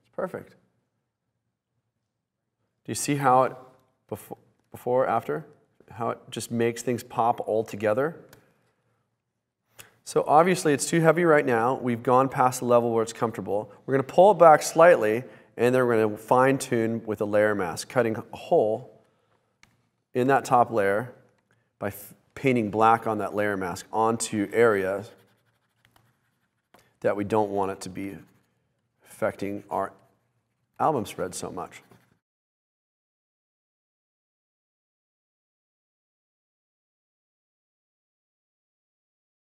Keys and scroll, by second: 4.0 super+z, 4.7 super+z, 5.9 super+z, 6.5 super+z, 7.8 super+z, 10.9 super+z, 20.5 b.